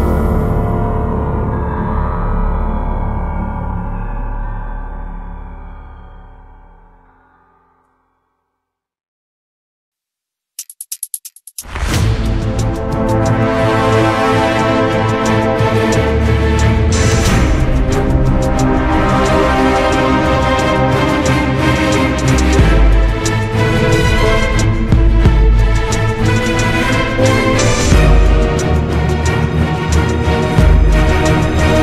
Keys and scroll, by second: 6.1 Escape, 18.6 Escape.